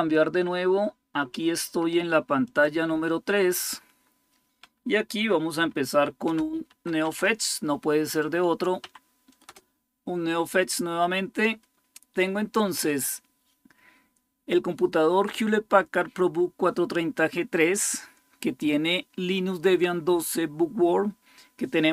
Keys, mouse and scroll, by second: 0.0 click, 2.2 click, 5.3-7.4 typing, 8.6 Tab, 9.2 typing.